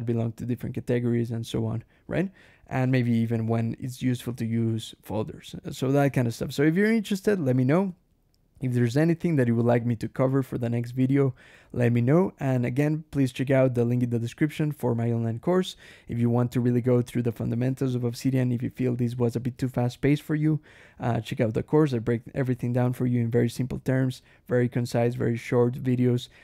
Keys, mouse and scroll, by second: 5.9 Escape, 6.1 j, 7.4 j, 8.9 d, 9.2 Escape, 9.4 k, 11.4 Escape, 11.7 j.